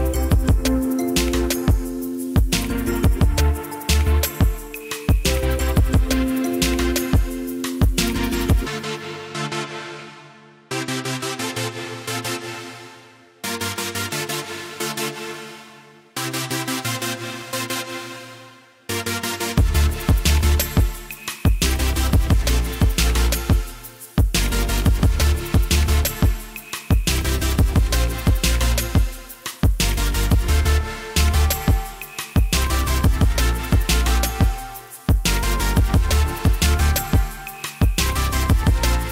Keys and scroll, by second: 25.4 1, 25.6 Return, 27.6 2, 27.7 Return, 30.5-33.7 typing.